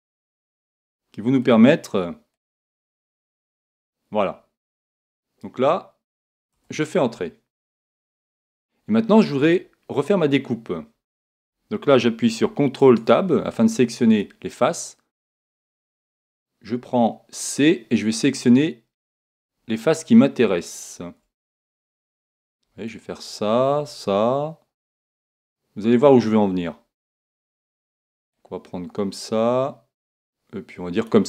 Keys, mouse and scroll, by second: 12.8 ctrl+Tab, 16.0 c.